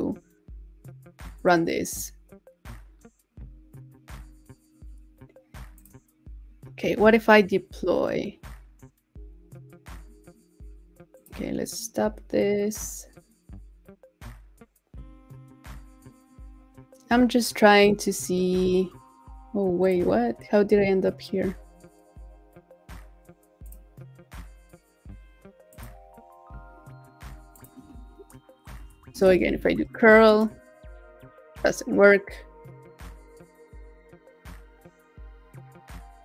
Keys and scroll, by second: 29.6 super+v.